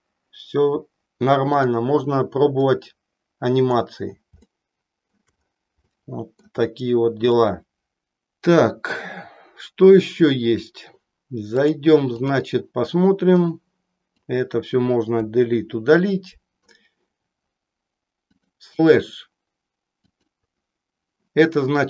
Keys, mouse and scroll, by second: 2.5-3.9 drag, 4.5 shift+middle click, 6.0 shift+middle click, 7.4 click, 11.6 click, 13.3 click, 18.2 click, 20.1 click.